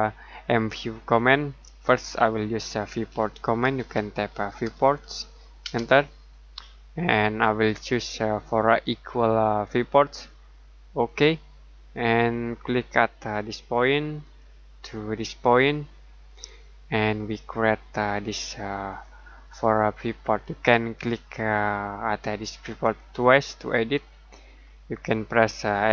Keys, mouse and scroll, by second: 3.1-4.5 typing, 5.6 space, 8.6 click, 14.2 click, 18.9 click, 22.6 click.